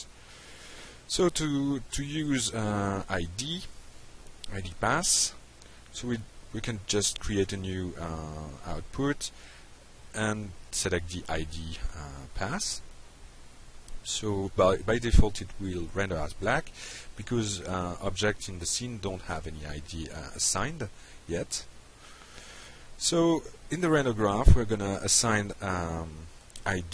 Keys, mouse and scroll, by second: 5.3 click, 9.8 click, 10.5 click, 11.2 F5, 18.5 click, 19.9 middle click, 21.9-22.3 alt+middle drag, 22.8 middle click, 23.6 alt+middle click, 25.6 click.